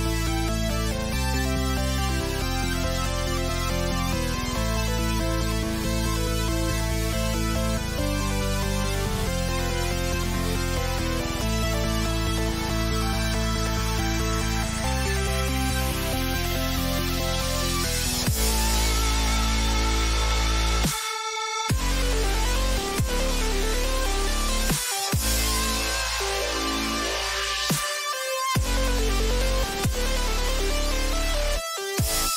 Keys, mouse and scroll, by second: 7.9-10.0 middle drag, 14.0-15.9 middle drag, 14.5 a, 19.3 k.